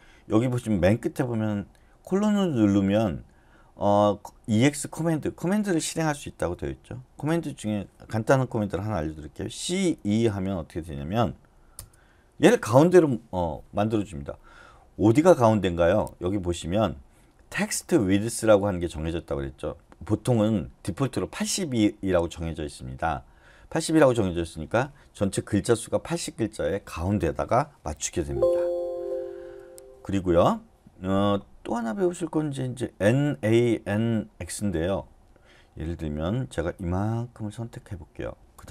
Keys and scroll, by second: 9.6-9.9 typing, 11.7 Return, 28.8 Escape, 29.4 u.